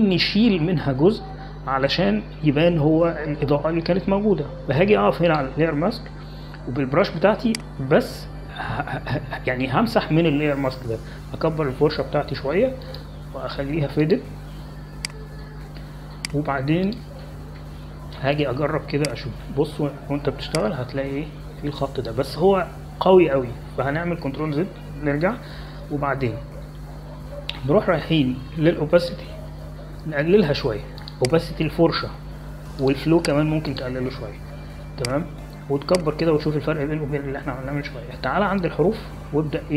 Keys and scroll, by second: 13.3-13.9 typing, 26.1 ctrl+z, 37.9-39.5 typing.